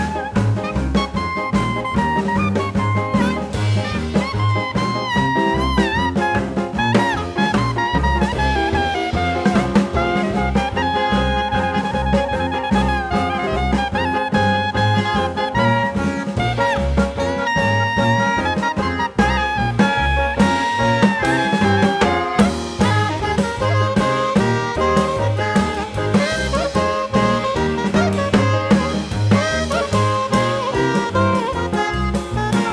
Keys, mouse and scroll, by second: 1.5 click, 1.9 click, 2.5 click, 5.7 click, 6.6 click, 7.7 click, 8.3 click, 9.3 ctrl+alt+c, 10.4 click, 12.5 click, 13.0 click, 13.5 click, 14.0 click, 17.4 click, 18.2 click, 20.1 click, 22.3 click, 23.0 click, 24.8-25.6 typing, 26.6 ctrl+alt+c, 27.4 click, 31.1 click, 31.7 click, 32.3 click.